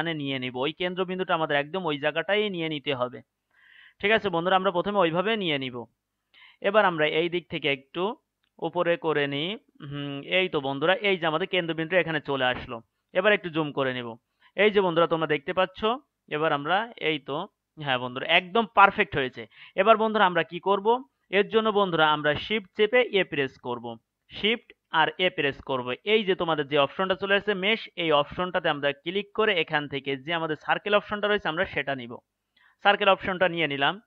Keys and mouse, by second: 7.7-12.9 drag, 12.9-18.8 middle drag, 24.8 shift+a.